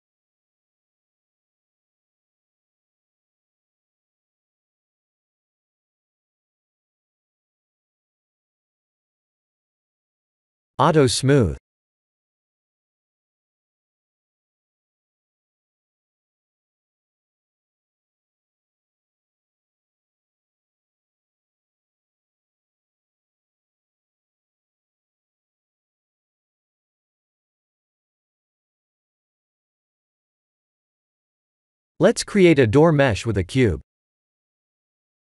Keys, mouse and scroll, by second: 2.3 click, 4.8 click, 6.2 click, 7.2 click, 8.0 click, 8.2 x, 8.7 middle click, 9.2 shift+z, 9.6 middle click, 12.1 click, 13.1 click, 14.3 click, 14.9 click, 15.3 click, 16.1 click, 16.5 right click, 17.9 click, 18.3 click, 18.6 middle click, 18.8 middle click, 18.9 middle click, 19.2 middle click, 19.5 middle click, 19.6 middle click, 20.2 middle click, 20.2 KP_1, 20.7 shift+z, 21.7 click, 22.7-23.2 middle click, 22.9 middle click, 23.0 middle click, 23.1 middle click, 25.0 middle click, 25.4 middle click, 25.4 click, 25.7 middle click, 28.1 click, 29.1 click, 29.7 KP_3, 31.4 click, 32.4 shift+a.